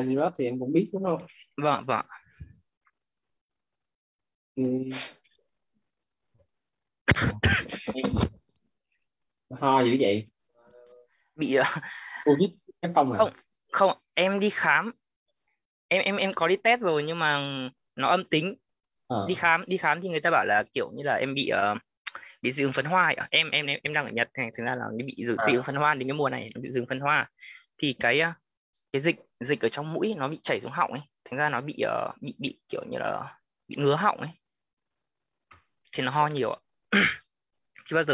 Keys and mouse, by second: 1.5-5.7 typing, 8.7 click, 27.7 click, 30.4-33.8 typing, 35.4 click.